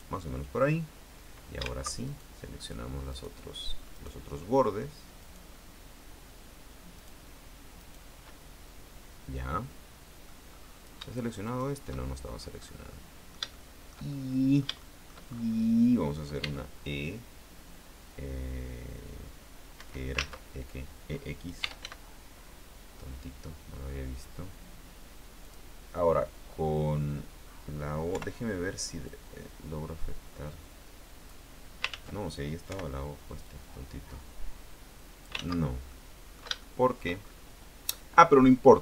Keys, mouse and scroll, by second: 0.1 click, 2.2 alt+shift+right click, 3.3 shift+right click, 4.1 shift+right click, 5.3 shift+right click, 7.1 shift+right click, 7.9 shift+right click, 9.9 middle click, 10.7-11.1 scroll up 1, 11.6 shift+right click, 12.1-12.8 shift+scroll down 1, 12.8-15.4 middle drag, 16.5 e, 19.9 Escape, 21.7 e, 25.6 click, 28.3 o, 29.2 click, 30.1-30.8 scroll down 1, 32.1 ctrl+z, 32.8 o, 33.6 click, 34.2-34.9 scroll down 4, 36.0 ctrl+z, 36.0 ctrl+click, 37.3-37.7 shift+scroll up 2, 38.0 scroll down 2, 38.3-38.8 middle drag.